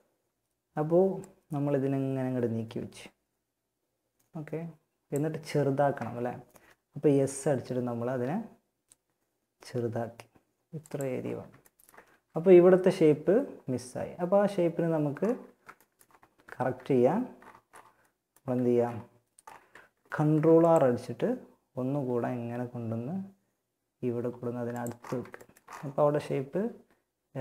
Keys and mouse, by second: 0.4-2.2 drag, 6.4 s, 11.3 a, 14.4-22.6 middle drag, 19.3 ctrl+r, 24.9-27.4 middle drag, 25.7 a.